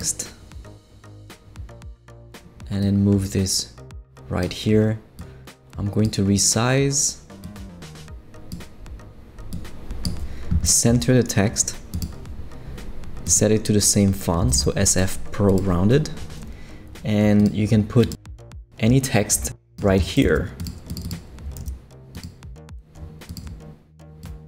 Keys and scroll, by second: 14.2-15.0 typing, 20.2 shift+super+c, 21.0 super+c, 21.6 super+v.